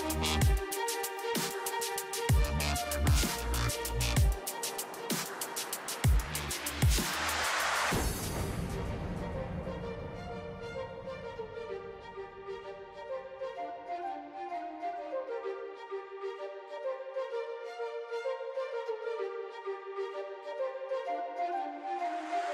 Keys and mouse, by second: 0.7 b, 2.0 KP_3, 4.1 ., 4.5 ,, 5.8-9.7 typing, 11.8 a, 12.0 b, 12.5 r, 13.3 g, 14.3 ctrl+s, 15.0 KP_1, 15.5 ctrl+s, 16.9 b, 17.7 a, 17.9 b, 18.7-20.5 drag, 20.5 ctrl+s, 21.0 a, 21.9 b.